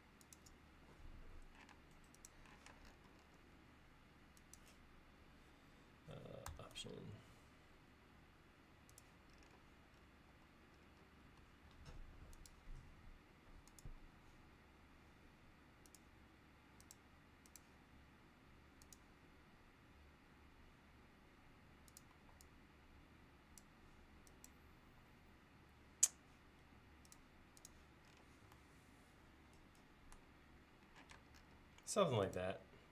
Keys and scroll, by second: 0.7 l, 1.8 space, 14.1 l, 22.2 e, 24.9 l, 31.2 space, 31.8 l.